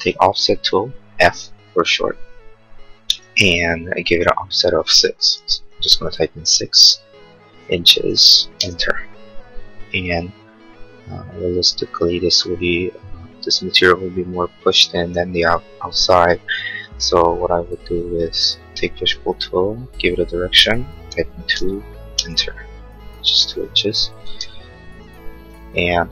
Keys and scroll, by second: 6.5 6, 8.0 shift+', 8.5 Return, 21.5 2, 22.1 Return, 24.2 space, 25.0 Escape.